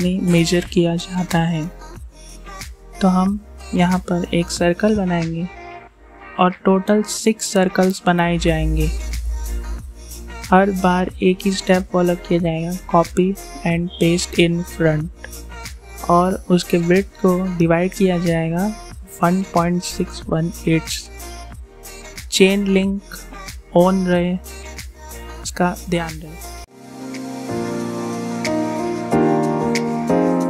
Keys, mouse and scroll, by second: 1.1 Return, 2.9 click, 6.6 click, 10.5 click, 13.1 Return, 14.4 click, 19.5 Return, 21.4 click, 23.3 click, 25.6 click, 28.6 Return.